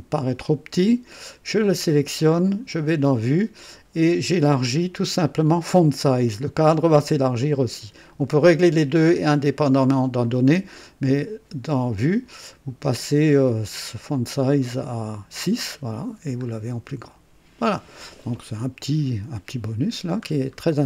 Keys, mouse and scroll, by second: 2.7 click, 9.3 click, 10.2 click, 13.9 click, 14.6-14.9 scroll up 1, 16.4-16.8 scroll down 1, 18.5 scroll down 1, 19.4-20.4 middle drag, 20.6 scroll down 1.